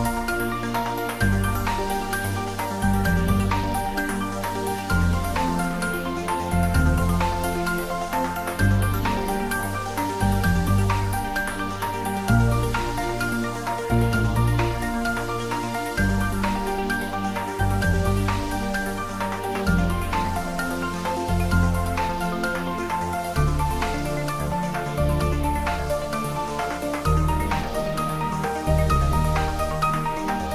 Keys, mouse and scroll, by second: 0.7-2.9 drag, 2.9-5.1 drag, 5.1 scroll up 1, 5.7-6.4 scroll down 1, 6.7 s, 8.1 a, 9.9-11.4 typing, 13.0 click, 13.9 scroll up 1, 19.0 r, 20.8 click, 24.5 s, 25.5 y.